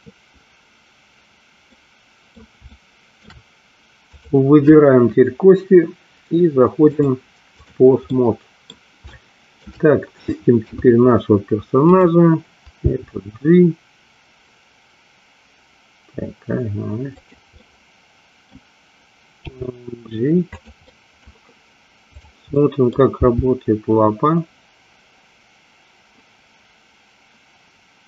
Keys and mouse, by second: 1.8 middle click, 2.8 shift+middle click, 4.2 click, 7.0 click, 8.0 middle click, 9.2 shift+middle click, 10.7 KP_3, 12.9 g, 17.3 click, 17.6-18.6 middle drag, 19.7 g, 20.9 middle click, 22.2 click, 22.7 middle click, 23.3 g.